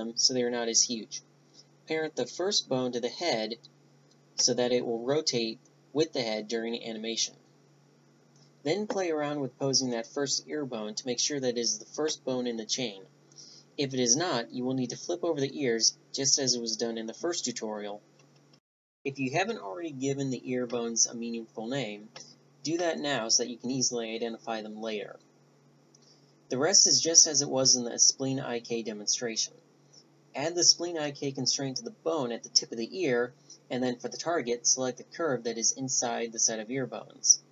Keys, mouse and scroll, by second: 0.0 Tab, 0.4-2.3 drag, 2.2 ctrl+p, 4.1 a, 4.5 Tab, 7.9 r, 8.3-9.4 right drag, 12.1-19.3 right drag, 19.6 right click, 21.1-21.9 right drag, 22.8 right click, 23.4 click, 24.0 BackSpace, 25.9-26.5 drag, 26.6 click, 27.6 right click, 29.7 right click, 30.1 click, 30.3 right click, 30.6 right click, 31.2 middle click, 31.6-34.6 drag, 34.6 right click, 35.0-36.2 drag.